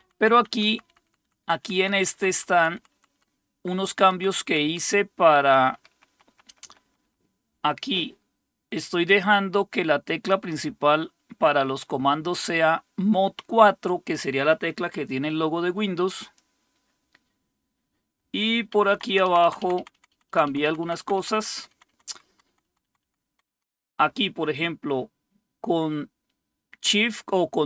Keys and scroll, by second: 0.0 Down, 0.2 Down, 0.3 Down, 0.5 Down, 0.7 Down, 0.8 Down, 1.0 Down, 1.2 Down, 1.9 Down, 2.1 Down, 2.3 Down, 2.6 Down, 2.7 Down, 2.8 Down, 3.1 Down, 3.2 Down, 3.4 Down, 3.6 Down, 4.6 Down, 5.0 Down, 5.2 Down, 6.1 Up, 6.2 Up, 6.4 Up, 6.6 Up, 18.9 Down, 19.1 Down, 19.2 Down, 19.4 Down, 19.6 Down, 19.8 Down, 19.9 Down, 20.1 Down, 20.3 Down, 20.4 Down, 20.7 Down, 20.8 Down, 21.0 Down, 21.2 Down, 21.3 Down, 21.5 Down, 21.7 Down, 21.9 Down, 22.2 Down, 22.3 Down, 22.5 Down, 22.6 Down, 22.8 Down, 23.0 Down, 23.3 Down, 23.5 Down.